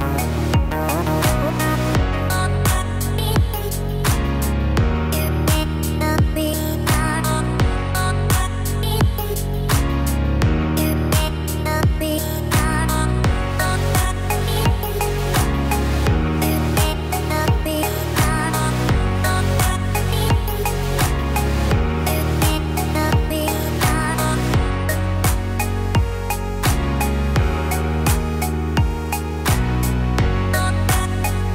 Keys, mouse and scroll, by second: 0.2-1.2 scroll down 1, 1.2 click, 1.2-1.8 scroll down 1, 4.7 scroll up 2, 5.2-6.0 scroll down 2, 5.6 click, 6.0 middle click, 8.0-8.9 scroll up 3, 8.9 click, 10.9 click, 15.9 click, 19.0 click, 20.9 Tab, 21.5-22.1 scroll up 1, 23.1 ctrl+r, 27.2 Tab, 28.4 Tab, 29.1 scroll up 1, 29.2-30.1 scroll down 1, 30.1-30.9 scroll down 1, 30.9 ctrl+r.